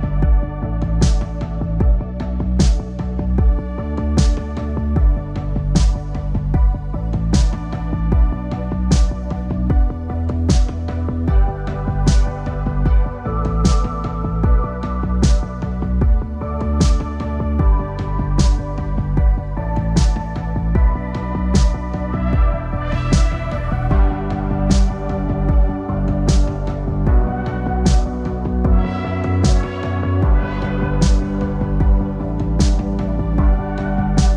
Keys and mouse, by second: 0.0-0.3 typing, 3.9 KP_3, 5.1 ctrl+KP_3, 6.6 c, 9.4 g, 12.6 a, 12.8 a, 13.8 c, 18.1 KP_3, 19.6 c, 22.4 g, 25.0 a, 25.2 a, 26.0 c, 28.3 KP_3, 30.0 KP_3, 31.3 c.